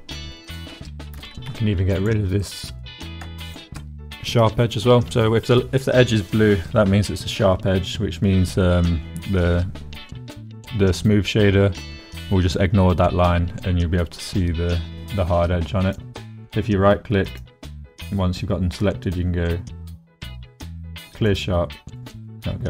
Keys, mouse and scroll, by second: 0.5 click, 0.7 click, 1.2 2, 2.4 click, 2.6 middle click, 3.4 ctrl+middle click, 4.3 middle click, 15.8 click, 17.2-21.4 drag, 22.0 middle click.